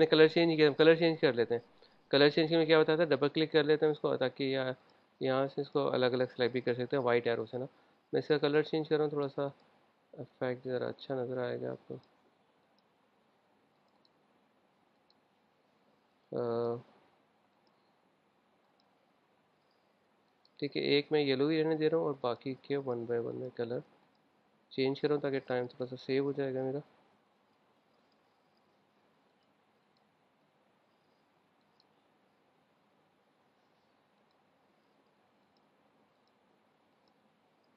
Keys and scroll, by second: 1.4 super+z.